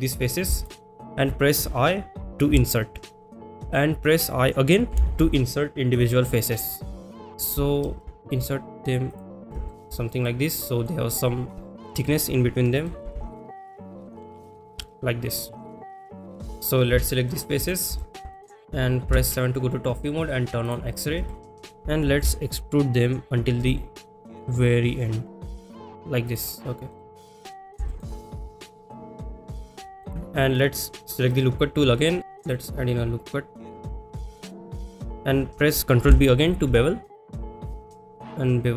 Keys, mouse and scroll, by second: 0.2 click, 0.6 shift+click, 9.1 shift+click, 9.7 shift+middle click, 10.2 middle click, 13.4-14.6 shift+drag, 16.1 click, 16.4 click, 17.0 shift+click, 17.3 shift+middle click, 17.5 middle click, 18.0 shift+middle drag, 18.3 middle drag, 19.0 KP_7, 20.6 click, 21.3 shift+middle click, 26.3 click, 26.9 middle click, 27.4 middle click, 27.9 shift+middle click, 28.6 click, 29.1 shift+middle click, 29.8 shift+middle click, 31.4 click, 32.4 ctrl+z, 32.4 click, 34.6 click.